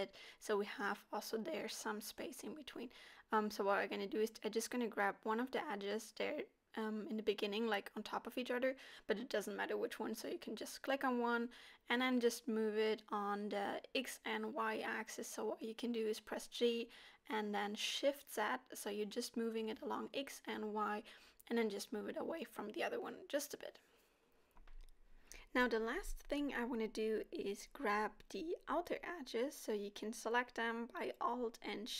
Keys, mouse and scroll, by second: 0.4 click, 0.6 g, 2.2 KP_7, 2.7 g, 4.4 middle click, 5.0 middle click, 5.3 click, 5.6 click, 6.3 h, 7.1 ctrl+z, 7.6 g, 9.5 middle click, 11.0 s, 11.8-12.2 scroll down 3, 12.0 shift+middle click, 12.3 scroll up 4, 12.7 shift+middle click, 13.2 click, 13.7 h, 14.3 ctrl+z, 14.6 g, 16.7 middle click, 17.8 scroll down 2, 18.0 middle click, 19.2 click, 19.9 KP_7, 21.0 g, 22.6 scroll down 3, 22.8 middle click, 23.8-24.4 scroll up 2, 24.2 middle click, 26.9 alt+click, 27.7 alt+shift+click, 29.3 middle click, 30.2 alt+shift+click, 31.0 middle click, 31.3 alt+shift+click.